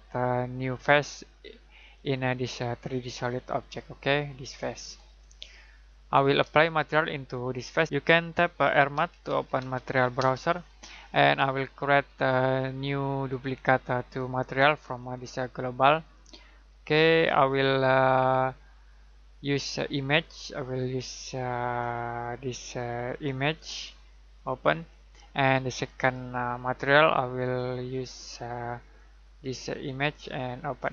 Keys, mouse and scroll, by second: 1.7 click, 4.5 ctrl+click, 6.0 Escape, 6.5 middle click, 7.8 click, 8.3-10.1 typing, 11.8 right click, 13.2 click, 14.9 right click, 16.0 click.